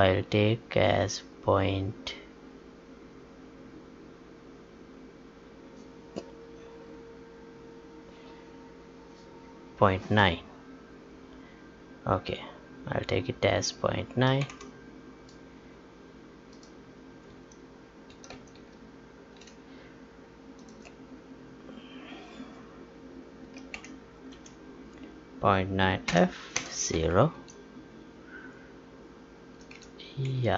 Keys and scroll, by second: 17.5 alt+Tab, 27.3 Right, 29.5 Right, 30.2 Down.